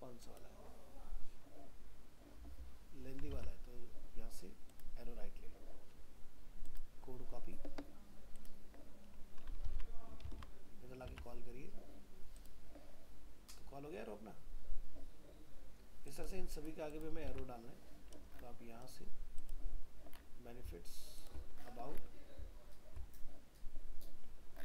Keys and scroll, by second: 3.3 alt+Tab, 9.6 ctrl+v, 11.1 alt+Tab, 17.3 alt+Tab.